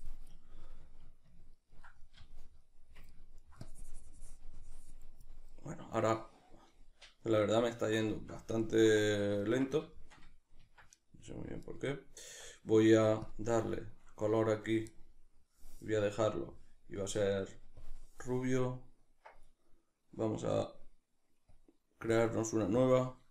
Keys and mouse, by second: 0.9-3.7 ctrl+middle drag, 3.7-6.7 drag, 6.7-11.7 middle drag, 10.9 Tab, 11.7-13.3 right drag, 13.3 Tab, 13.7-17.9 shift+middle drag, 17.9-23.3 drag.